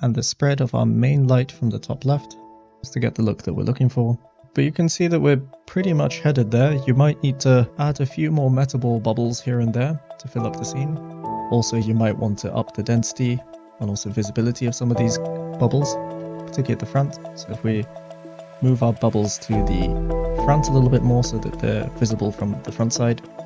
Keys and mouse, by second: 4.8 click, 5.3 click, 6.6 click, 7.6 Tab, 7.8 Tab, 10.9 click, 11.7 click, 12.2 click, 13.4-14.0 middle drag, 14.5 middle click, 15.7 g, 16.2 x, 17.0 click, 17.7 g, 18.5 click, 23.0 click.